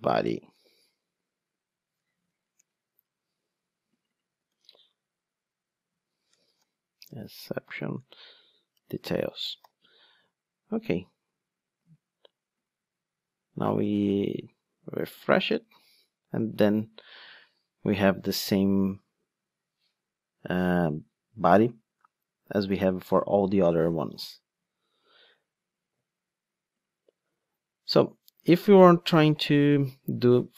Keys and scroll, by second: 0.2 alt+Return, 2.6 Return, 9.6 alt+super+l.